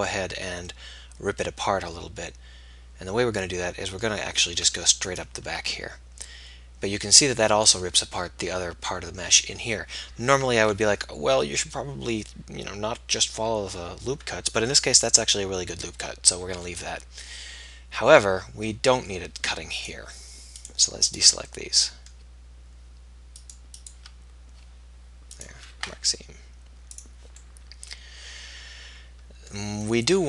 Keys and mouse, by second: 6.1-7.1 middle drag, 22.0-23.8 middle drag, 27.7 middle click, 28.7 middle click, 29.4-30.2 middle drag.